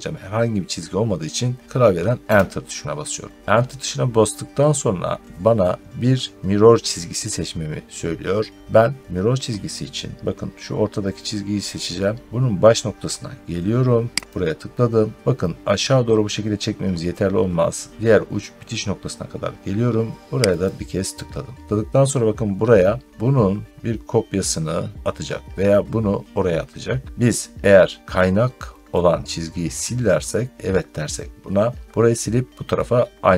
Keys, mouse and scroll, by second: 2.1 Return, 14.2-33.3 drag.